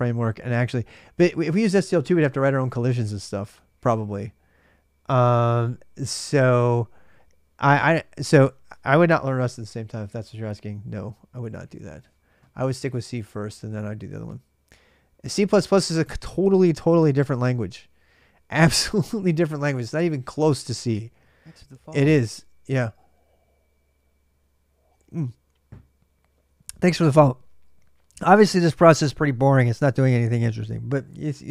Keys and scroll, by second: 29.5 ctrl+c, 29.9-30.8 typing.